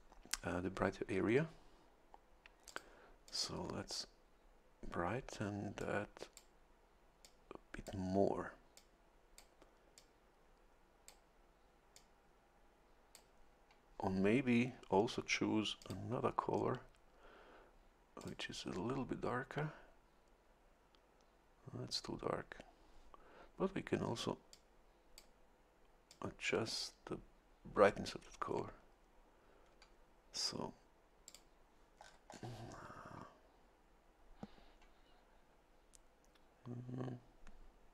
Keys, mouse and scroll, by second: 2.7 click, 3.3 click, 5.8 click, 7.2 click, 8.7 click, 10.0-11.3 drag, 11.9-13.3 drag, 15.8 click, 18.2 click, 24.5 click, 26.1 click, 31.3 click, 32.0-32.5 scroll down 1.